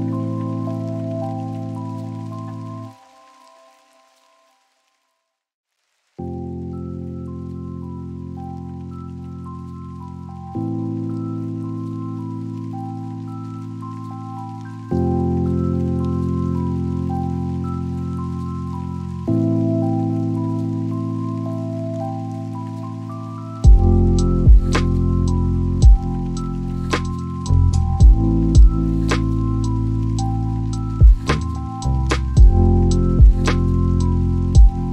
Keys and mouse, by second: 1.0 click, 5.2 click, 7.8 click, 12.0 click, 15.4 click, 17.1 click, 18.3 click, 19.5 g, 20.3 click, 21.0 click, 21.7 g, 24.2 click, 32.7 click.